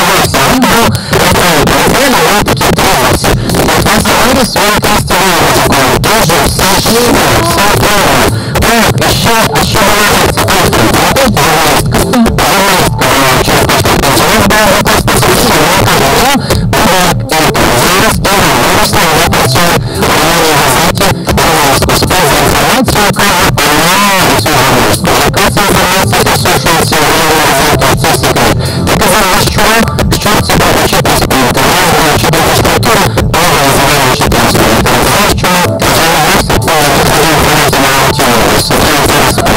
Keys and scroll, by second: 0.0 Down, 0.1 Down, 0.3 Down, 0.4 Down, 0.6 Down, 0.7 Down, 1.1 Down, 1.3 Down.